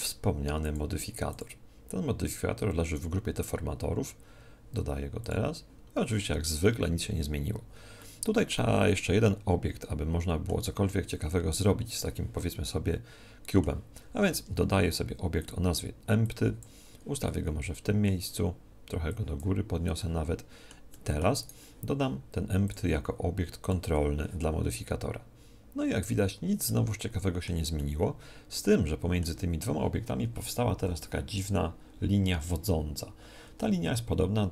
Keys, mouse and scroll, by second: 0.7-3.3 drag, 6.6-9.9 middle drag, 11.3-14.5 middle drag, 14.3 shift+a, 16.3 click, 17.3-19.1 middle drag, 19.1 click, 20.0-21.4 middle drag, 21.4 right click, 22.7-24.7 drag, 26.7-29.7 middle drag, 30.5 right click, 30.8 g, 32.6 right click.